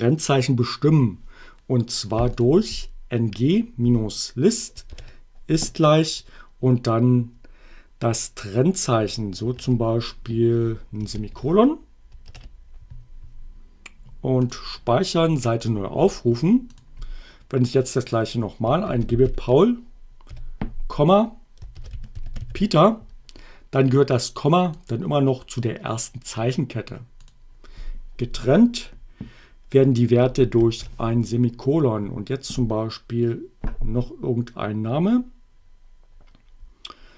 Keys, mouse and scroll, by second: 2.4 click, 4.9 shift+0, 11.2 shift+,, 14.4 click, 15.8 click, 18.6-20.3 typing, 21.5-23.0 typing, 24.2 click, 27.3 click, 30.6 shift+,.